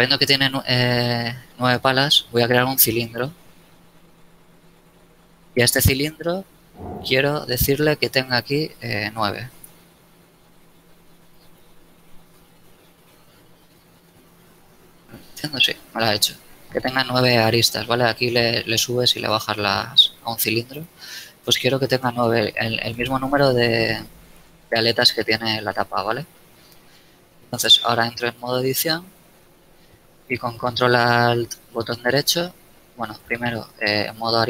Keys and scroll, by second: 2.3 shift+a, 9.3 KP_9, 9.6 KP_Enter, 12.3 Num_Lock, 12.9 KP_Enter, 24.3 KP_1, 27.3 shift+Tab, 33.3 ctrl+alt+Tab.